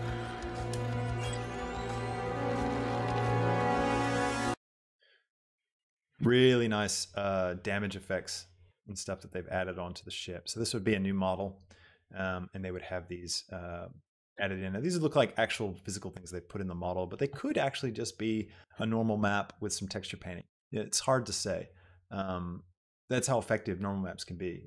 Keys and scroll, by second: 4.4 space.